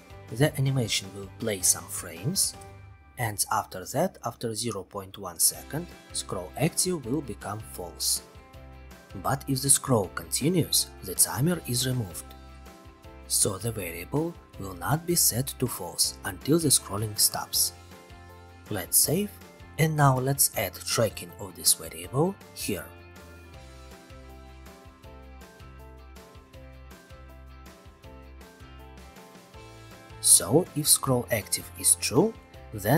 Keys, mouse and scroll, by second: 7.0 click, 10.1 click, 15.0-16.0 drag, 18.4 click, 19.2-20.3 middle drag, 24.0 click, 25.5 click, 27.8 click, 28.4 click, 31.0 click, 32.1 click.